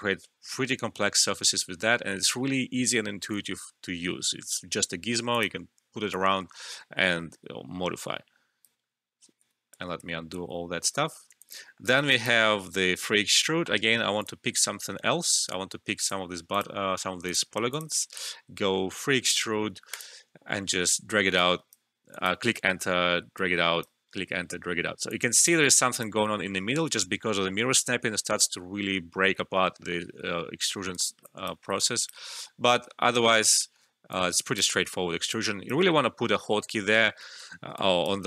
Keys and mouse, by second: 8.7 Return, 11.4 alt+click, 11.6 alt+middle click, 11.8 alt+right click, 12.1 alt+click, 15.4 ctrl+d, 16.0 click, 19.8 click, 22.3 Return, 23.3 click, 23.9 typing, 24.0 Return, 25.0 click, 25.6 alt+click, 26.2 alt+middle click, 30.4 alt+middle click, 30.4 typing, 30.5 alt+middle click, 30.9 alt+right click, 31.2 alt+click, 31.6-32.0 typing, 31.8 alt+click, 33.2 Return, 33.2 typing, 34.1-37.7 drag.